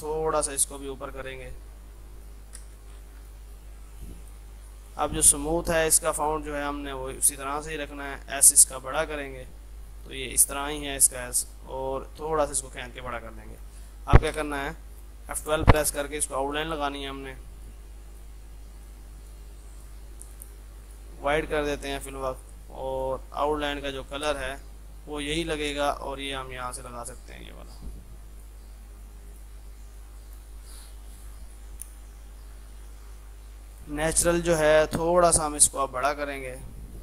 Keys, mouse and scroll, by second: 2.7 space, 2.8 click, 3.5 Up, 4.3 click, 8.8 shift+s, 10.0-13.2 drag, 13.2 F2, 13.4 click, 14.3 F12, 16.6 F12, 17.6 click, 23.0 click, 24.3 space, 26.2 right click, 27.6 F3, 28.3 click, 28.8 F3, 29.4 click, 29.6 F2, 30.0-33.8 drag, 34.2 F2.